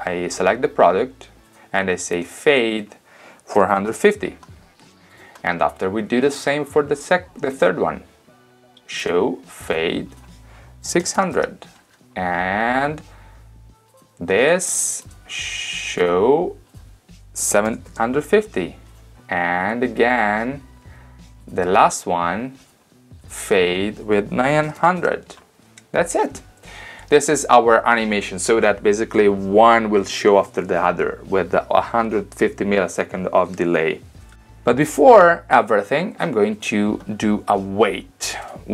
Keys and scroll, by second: 3.5-4.5 typing, 10.7-11.7 typing, 17.4-18.5 typing, 24.4-25.3 typing.